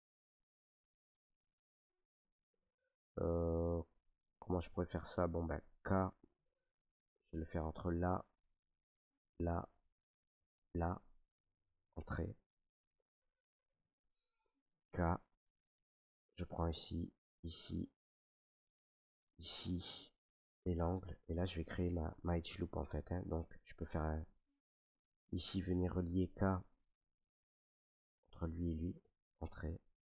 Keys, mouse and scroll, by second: 0.2 click, 0.5 right click, 2.0 Escape, 4.5 middle click, 6.3 k, 7.4 click, 9.2 click, 10.6 click, 11.6 Return, 13.3 middle click, 13.7 middle click, 14.7 k, 17.1 click, 19.0 click, 19.5 click, 20.9 click, 22.1 Return, 22.1 click, 23.1 middle click, 23.4 Tab, 24.1 Tab, 25.0 right click, 26.2 k, 27.1 click, 28.2 click, 29.0 Return, 29.5 k.